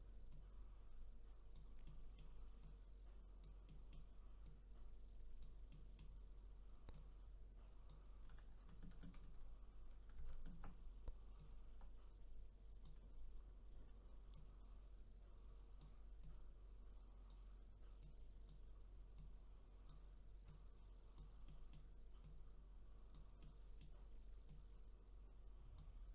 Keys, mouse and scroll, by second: 0.3-1.9 drag, 1.9 middle click, 2.6-3.7 drag, 3.7 middle click, 4.4-5.7 drag, 5.7-6.9 middle drag, 6.9-10.0 drag, 10.2 ctrl+z, 11.4-21.5 drag, 21.5 middle click, 22.2-23.4 drag, 23.4-24.5 middle drag, 24.5-26.1 drag.